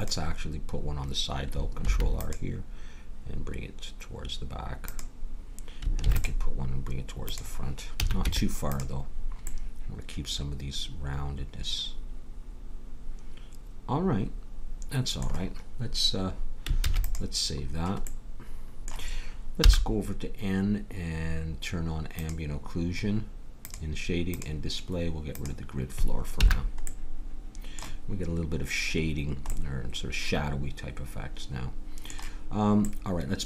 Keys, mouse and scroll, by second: 1.8 ctrl+r, 6.0 ctrl+r, 8.0 a, 8.2 Tab, 16.8 ctrl+s, 19.6 n, 22.2 click, 22.8-27.3 drag, 26.3 n.